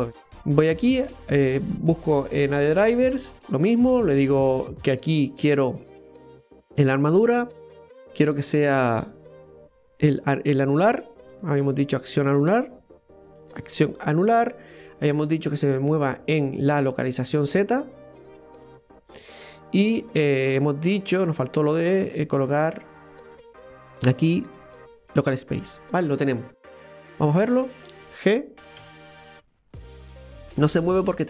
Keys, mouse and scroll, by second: 0.2-2.8 right drag, 21.6-23.7 right drag, 26.3 scroll down 1, 26.6-27.6 middle drag, 27.6 right drag, 28.8 g, 29.8 ctrl+z, 30.0-31.2 middle drag.